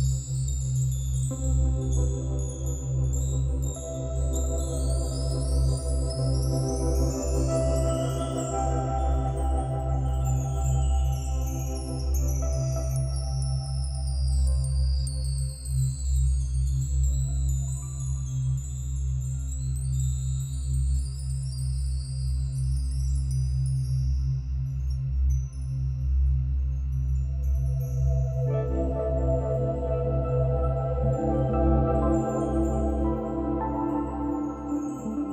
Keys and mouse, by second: 0.3 s, 1.0 Escape, 2.0 a, 2.7-4.9 drag, 5.2 Right, 6.2 s, 6.4 x, 7.1 click, 7.6 space, 8.4 space, 8.9 click, 9.2 space, 10.6 space, 10.8 click, 11.0 space, 12.5 space, 12.6 click, 15.7 click, 15.9 space, 17.1 space, 17.9 click, 20.9 ctrl+s, 21.0 ctrl+s, 22.0 click, 24.5-25.1 drag, 27.0 click, 27.7 click, 29.0 click, 30.2 8, 30.6 Return, 31.2 click, 32.1 typing, 32.6 Return.